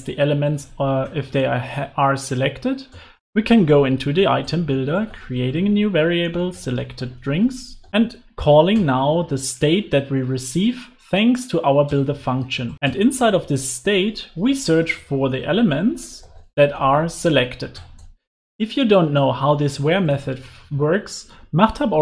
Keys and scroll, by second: 15.3 Return.